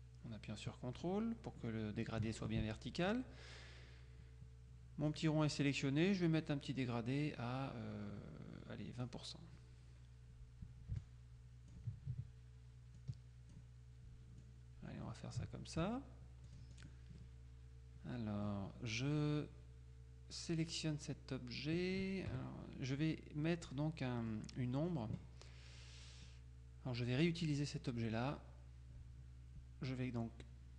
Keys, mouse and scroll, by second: 5.2 click, 9.0 click, 11.1 ctrl+click, 13.1 click, 14.5 click, 16.6-17.4 drag, 19.2 click, 22.4 KP_Subtract, 24.3 click, 27.3 click.